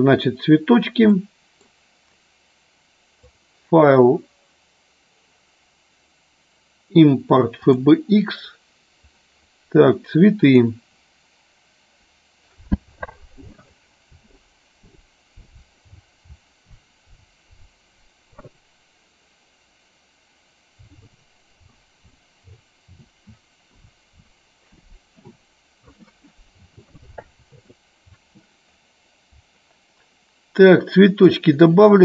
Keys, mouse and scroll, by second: 1.1-1.6 middle drag, 3.2-7.9 drag, 31.3-32.0 drag.